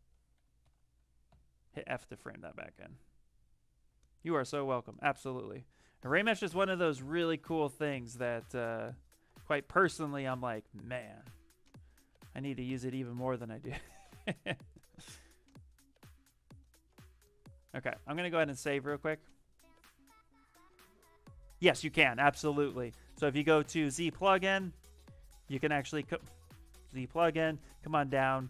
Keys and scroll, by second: 0.5 shift+f, 1.2 f, 5.8 shift+f, 8.1 f.